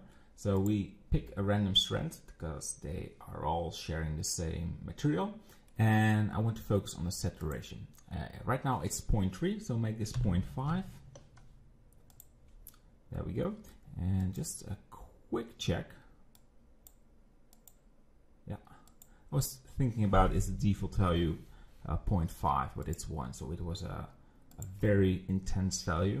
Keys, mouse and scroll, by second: 0.6 click, 5.7-7.4 middle drag, 7.4-10.4 drag, 14.2-17.3 drag, 22.8 click, 24.5 click, 24.8 Delete.